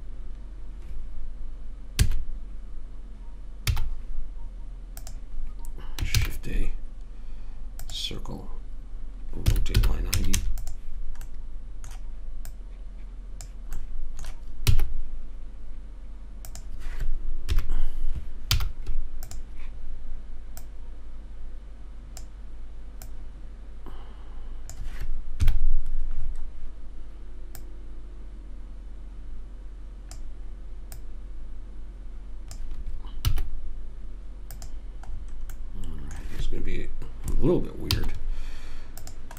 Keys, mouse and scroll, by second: 2.3 a, 4.0 z, 6.5 shift+a, 9.9 r, 11.7 middle click, 12.8 click, 15.1 s, 17.9 KP_3, 18.9 z, 21.0 click, 25.8 KP_Decimal, 26.6 click, 28.0 click, 31.3 click, 33.7 s, 37.2 middle click, 38.3 z.